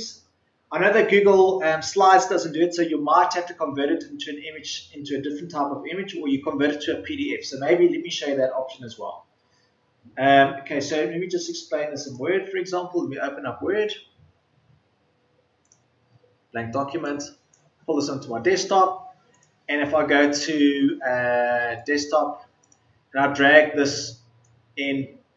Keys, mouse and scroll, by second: 12.8 Return.